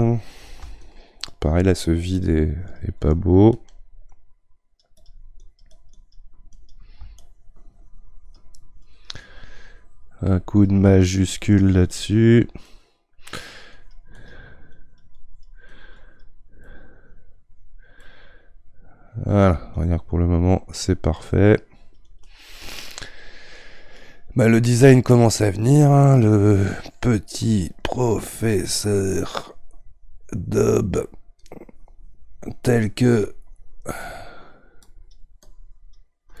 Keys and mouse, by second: 0.8-4.2 shift+drag, 4.2-5.4 right drag, 5.4-12.6 drag, 12.6 middle click, 13.5-16.6 drag, 16.6-19.7 middle drag, 19.7-22.7 shift+drag, 22.7-25.7 middle drag, 27.8-30.8 shift+drag, 31.4-36.4 shift+drag.